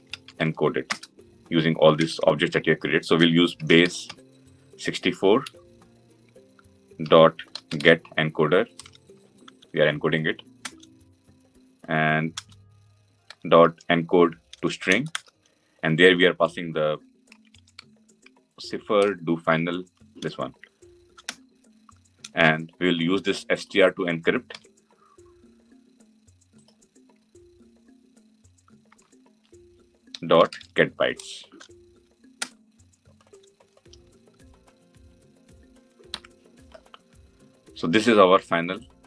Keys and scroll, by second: 10.6 Return, 25.1 ctrl+c, 28.7 ctrl+v, 32.3 Return.